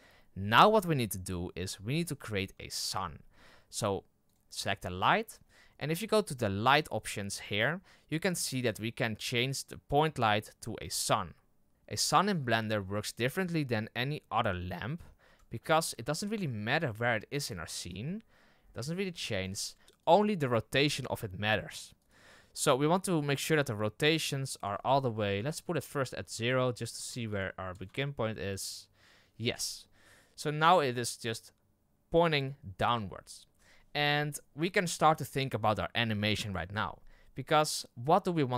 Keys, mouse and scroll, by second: 4.3 click, 4.7-5.8 scroll down 11, 5.1 middle drag, 5.8-6.3 scroll up 2, 10.9 click, 11.7 scroll up 2, 13.6-14.1 scroll up 4, 14.9-15.9 scroll down 1, 15.9 g, 18.0-18.7 middle drag, 18.7 g, 19.6 middle drag, 19.8 r, 20.5 r, 22.2-24.0 middle drag, 24.0-29.8 drag, 29.8-38.5 middle drag.